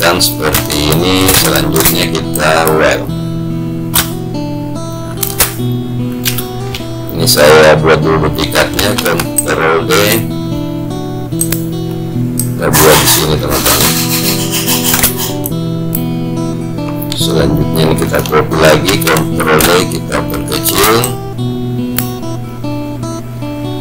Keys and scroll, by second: 9.1 ctrl+d, 18.4 ctrl+d.